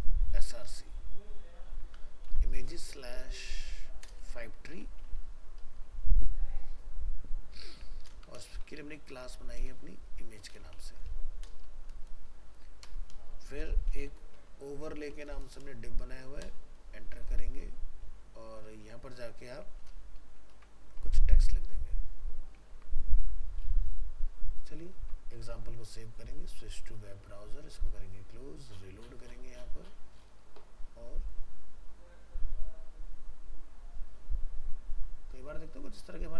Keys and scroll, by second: 20.5 ctrl+s.